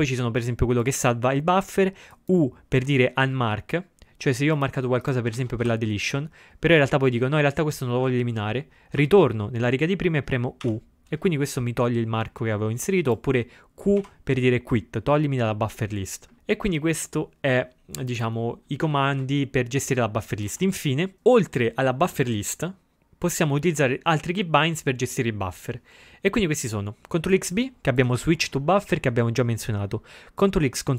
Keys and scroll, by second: 5.4 ctrl+a, 5.6 d, 9.1 Up, 10.7 u, 14.0 q.